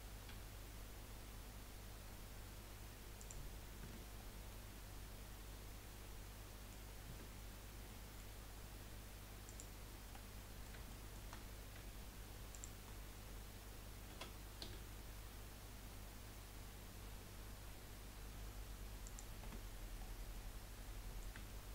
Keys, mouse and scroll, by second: 3.8 Tab, 4.2 scroll down 3, 4.5-7.1 middle drag, 7.1 Tab, 7.9 middle click, 8.3-9.4 scroll up 2, 9.4 click, 10.1-11.4 middle drag, 11.4-11.9 scroll up 1, 12.5 shift+click, 14.3 s, 19.9 Tab, 20.1 scroll down 2, 20.3-21.7 middle drag.